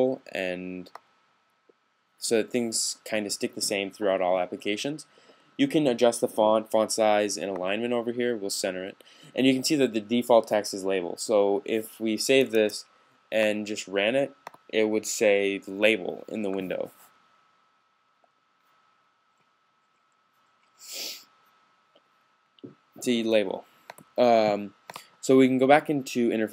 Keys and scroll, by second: 12.3 s.